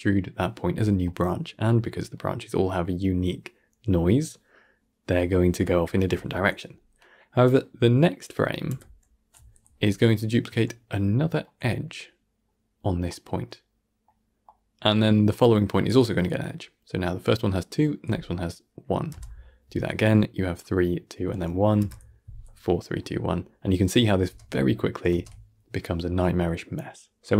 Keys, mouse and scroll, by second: 0.9-5.0 middle drag, 5.5-8.6 shift+middle drag, 8.6 Right, 10.2-10.5 scroll up 1, 10.5-17.5 shift+middle drag, 19.0 Right, 21.7 Right, 23.1-23.5 scroll down 1, 23.5-24.0 middle drag, 24.0 scroll up 1, 24.1 shift+space, 25.1 shift+space.